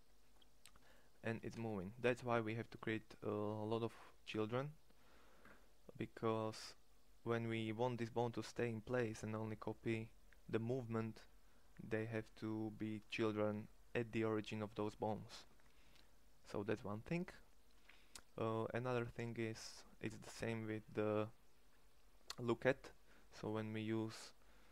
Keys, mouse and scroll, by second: 0.9 g.